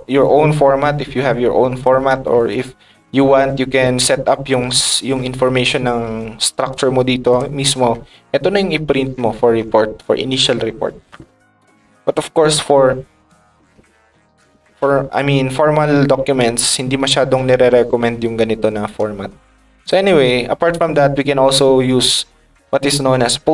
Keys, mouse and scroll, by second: 6.7 click, 7.6 middle click, 7.9 middle click, 8.3 middle click, 9.0 middle click, 15.8 middle click, 16.4 middle click, 17.0 middle click, 17.4 middle click, 17.7 middle click, 19.7 click.